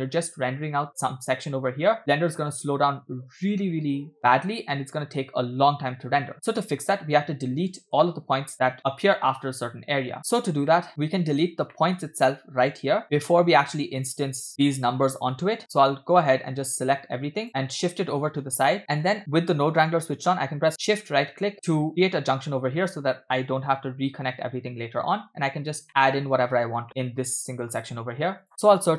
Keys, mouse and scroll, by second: 0.2 scroll up 1, 6.2-6.5 scroll up 2, 6.5 middle click, 7.8-8.2 scroll down 2, 8.0-8.3 shift+middle drag, 10.2 middle click, 10.8 middle click, 10.9 scroll up 3, 11.7 scroll up 3, 11.8 middle click, 13.3 middle click, 14.1 click, 14.5 click, 14.5 scroll up 1, 15.0-15.8 scroll down 5, 16.4-18.8 drag, 17.5 b, 18.8 middle click, 18.8-20.0 scroll up 5, 21.0-22.2 shift+right drag, 22.5 click, 23.7 g, 25.7-26.1 scroll up 2, 25.9 middle click, 26.9 middle click, 27.8 shift+a.